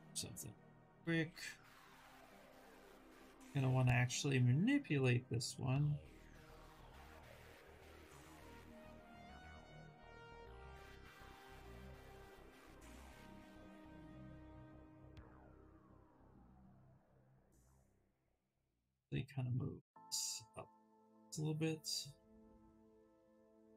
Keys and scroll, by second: 0.2 w, 3.8 ctrl+z, 15.9 q, 17.6-18.8 typing.